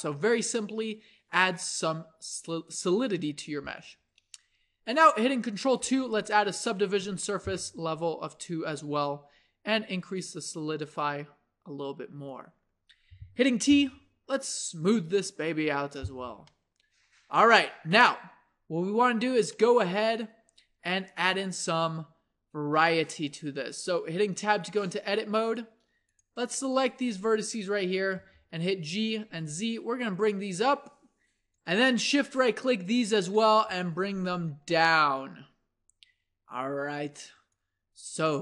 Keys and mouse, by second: 5.8 ctrl+2, 13.8 t, 14.8-16.0 drag, 16.0 t, 16.5-19.2 middle drag, 19.6-20.8 middle drag, 24.0 Tab, 28.1 g, 33.7 g.